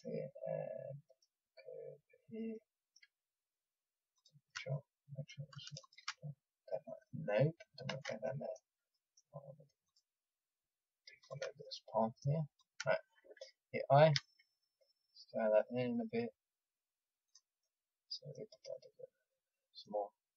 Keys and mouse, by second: 0.8 middle click, 0.8 click, 1.0-2.8 middle drag, 4.1-7.9 drag, 7.9 ctrl+z, 8.2 click, 14.1 i, 17.2-20.3 middle drag.